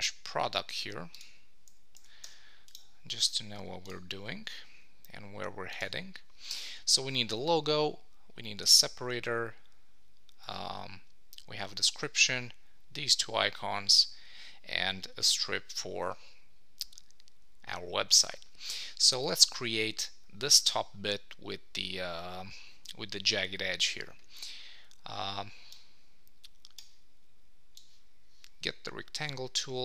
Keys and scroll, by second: 2.2 Escape.